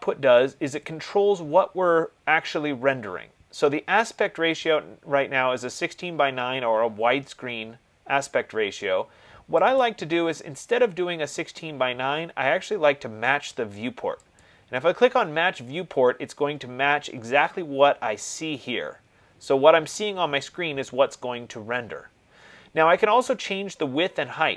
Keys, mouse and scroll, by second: 10.1 click, 14.7 click.